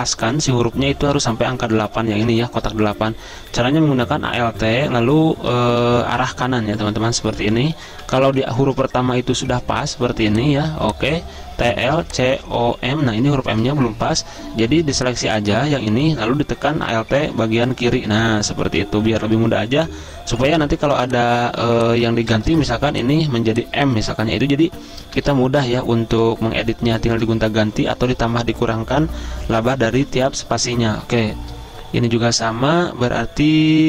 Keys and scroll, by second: 3.9 alt+Right, 4.1 alt+Right, 4.2 alt+Right, 4.4 alt+Right, 10.2 z, 12.0 space, 14.4-15.1 typing, 17.1 alt+Left, 17.3 alt+Left, 17.4 alt+Left, 17.8 alt+Left, 21.6 z, 22.6 t, 25.1 Delete, 25.3 m, 27.1 ctrl+z, 33.7 ctrl+z.